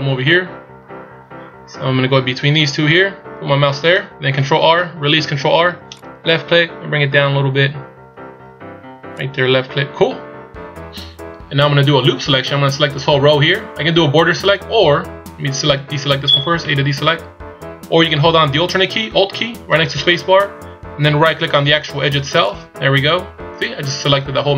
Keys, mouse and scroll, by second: 4.7 ctrl+r, 16.7 a, 22.5 alt+right click.